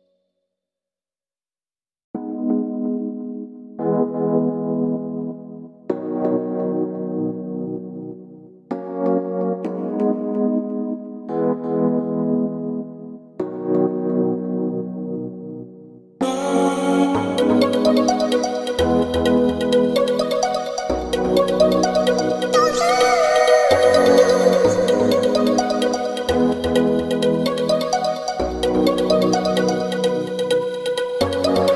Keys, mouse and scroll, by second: 4.3-10.2 drag, 12.8-16.5 middle drag, 18.0 shift+z, 22.3 shift+z, 22.7 ctrl+b, 24.0 ctrl+n, 27.9 alt+shift+z, 28.7-30.5 middle drag, 30.5 ctrl+b.